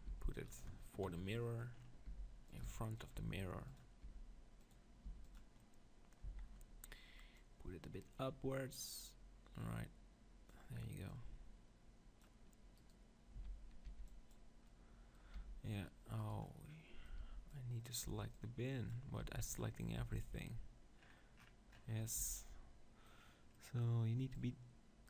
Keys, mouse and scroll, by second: 0.2 s, 0.5-2.4 drag, 2.2 g, 2.4 middle click, 2.6-4.4 drag, 2.8 s, 3.1 g, 4.0 g, 5.1 g, 6.3 z, 7.4-9.1 drag, 11.1-13.0 drag, 12.8-14.3 right drag, 13.4 z, 13.9 b, 14.3 click, 14.5 right click, 14.7-16.3 middle drag, 15.3 b, 16.3 click, 16.5-18.3 middle drag, 17.2 b, 18.1 b, 19.2 b, 20.0 b, 21.0-22.2 middle drag, 22.2 z, 24.3-25.0 drag.